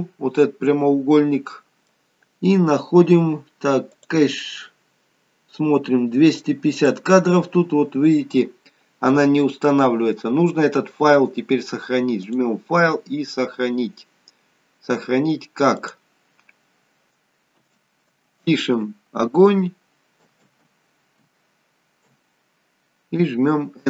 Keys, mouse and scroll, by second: 0.0 middle click, 4.0 click, 4.8-6.8 scroll down 5, 6.8 click, 12.2 click.